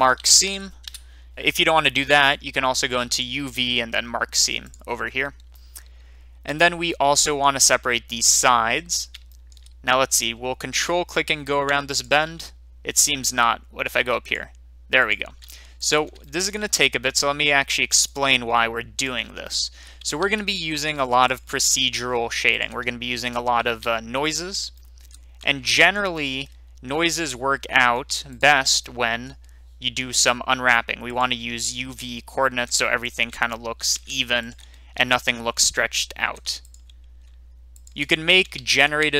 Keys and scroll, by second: 0.0-0.4 typing, 0.8 Return, 5.0-5.7 typing, 13.2 ctrl+z, 20.1 ctrl+z, 23.6 ctrl+z, 38.5 ctrl+z.